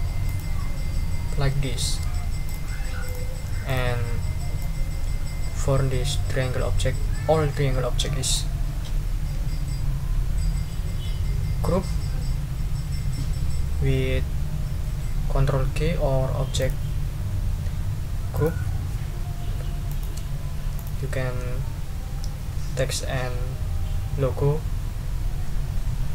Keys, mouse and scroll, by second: 0.2 click, 1.7 ctrl+scroll down 2, 2.4 ctrl+shift+click, 3.0 shift+click, 3.7 click, 4.6-8.5 drag, 16.6 click, 18.3 click, 19.9 shift+click, 20.7 shift+click.